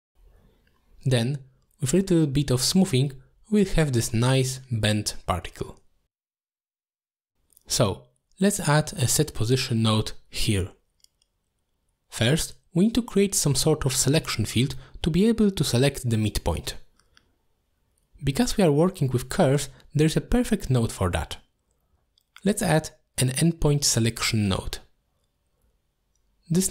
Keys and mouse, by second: 2.6 t, 4.4 click, 6.2 ctrl+z, 6.9 click, 7.7 shift+right click, 8.1 g, 8.7 click, 9.3 shift+a, 12.9 click, 14.2-15.8 drag, 23.6 middle click, 24.0 shift+a.